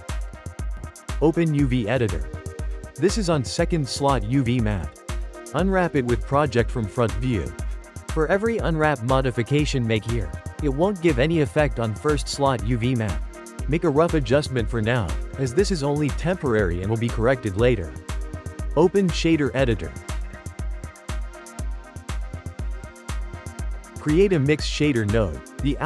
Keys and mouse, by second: 1.0-3.9 drag, 4.5 u, 7.7-8.8 ctrl+middle drag, 8.8 a, 10.3 g, 11.6 s, 13.2 g, 16.9 Tab, 18.3-20.3 drag, 20.7-23.5 shift+middle drag, 23.5 shift+a.